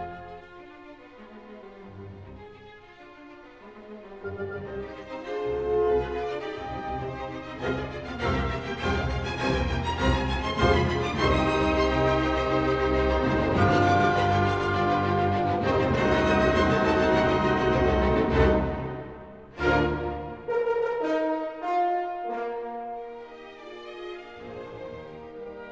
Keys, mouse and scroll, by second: 0.0 Escape, 0.7 s, 1.7 click, 3.3 click, 4.8 click, 6.1 typing, 6.7 Return, 8.5 scroll, 9.1-9.6 ctrl+scroll, 11.6 click, 13.1 click, 14.6 click, 16.6 typing, 17.2 Return, 20.3 scroll, 20.6 click, 21.5 scroll, 22.6 middle click, 23.4-24.6 middle drag.